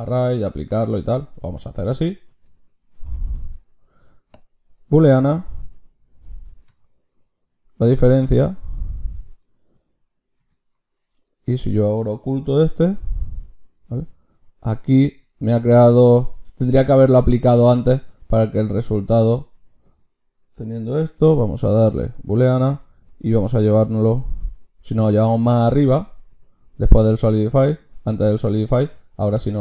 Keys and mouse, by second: 0.1-4.4 drag, 2.9 ctrl+shift+q, 11.3-12.6 drag, 12.6 h, 15.8-17.5 drag, 17.7-22.1 drag, 21.1 ctrl+shift+q.